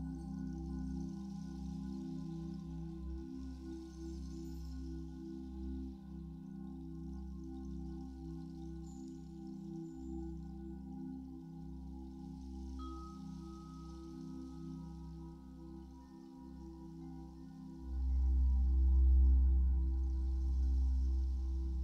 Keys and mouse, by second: 4.6 0, 5.6-13.1 drag, 13.1-13.5 typing, 15.8-18.3 shift+drag, 18.3 ctrl+s, 19.3-21.8 drag.